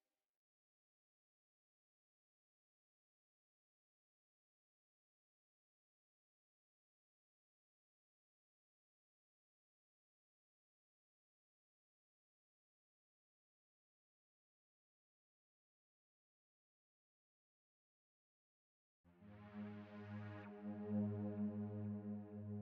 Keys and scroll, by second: 2.3 super+w, 3.9 super+w, 15.7 v, 16.6 b.